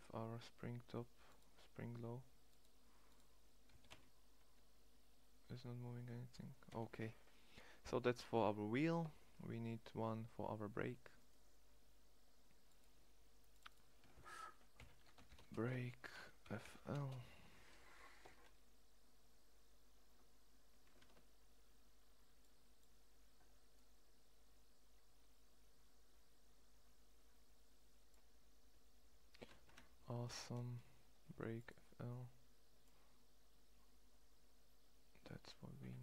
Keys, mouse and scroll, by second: 3.4 g, 7.5 middle click, 10.8-12.4 right drag, 20.7 ctrl+Tab, 23.8 click, 30.0 ctrl+z.